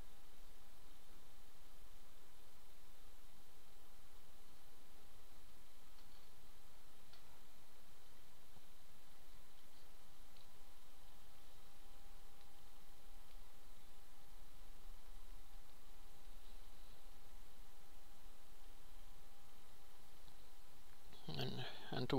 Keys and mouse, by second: 12.0 click, 17.6-22.1 drag, 21.3 x, 22.0 shift+a.